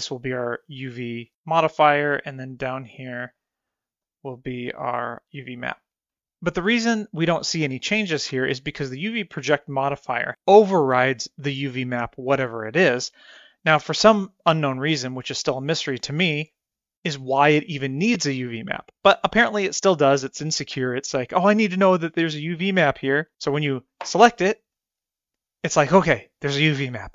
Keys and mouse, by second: 2.2-3.4 drag, 4.1 click, 4.7 click, 5.4 click, 24.3-25.4 drag.